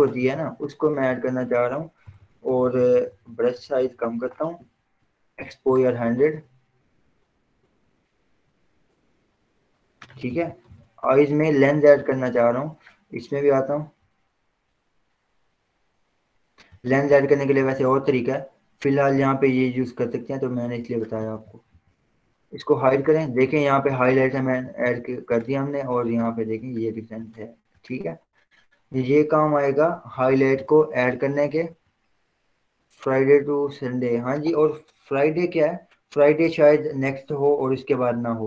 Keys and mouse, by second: 1.3 click, 2.3-4.2 typing, 5.6-11.0 drag, 11.0 ctrl+0, 11.1 z, 12.4-14.9 drag, 14.9-22.0 drag, 21.4 ctrl+0, 22.0 ctrl+0, 23.3 click, 32.4-36.5 drag.